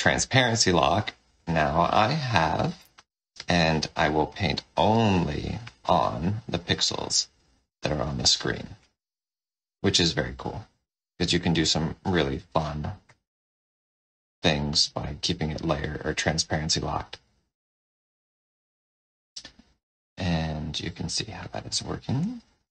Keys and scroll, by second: 2.6 shift+n, 12.2 shift+w.